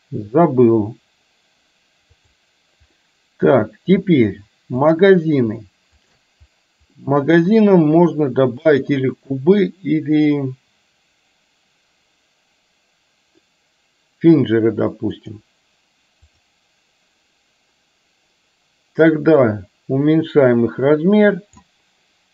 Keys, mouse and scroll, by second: 0.0 click, 2.2 click, 3.1-4.0 middle drag, 5.0 drag, 6.2 shift+click, 7.0 middle click, 8.7-15.5 drag, 16.5 click, 19.5-21.8 drag.